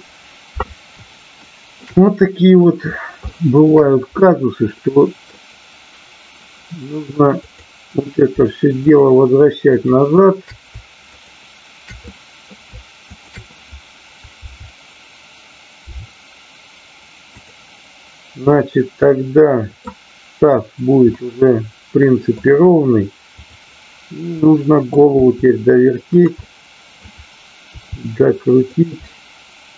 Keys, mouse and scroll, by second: 1.4-1.8 middle drag, 1.9-2.6 middle drag, 3.2-3.6 shift+middle drag, 4.7-5.2 middle drag, 9.7-10.5 shift+drag, 12.1 middle click, 13.1 shift+click, 14.3 KP_7, 15.8 r, 17.2 click, 18.5-19.9 middle drag, 21.1-22.4 middle drag, 24.4-24.8 middle drag, 25.1 r, 26.1 click, 26.4 middle click, 28.6 click, 29.0-29.7 middle drag.